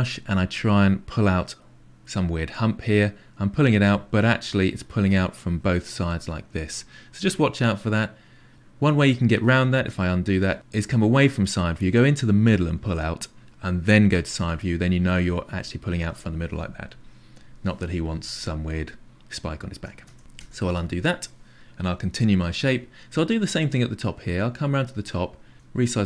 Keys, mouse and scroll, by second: 2.4-3.9 drag, 3.9-9.3 middle drag, 9.3 ctrl+z, 11.7-12.8 drag, 14.2 KP_3, 14.9-19.8 drag, 19.8-20.2 ctrl+z, 20.4 ctrl+z, 20.7 ctrl+z, 23.5-25.5 middle drag, 25.5 f.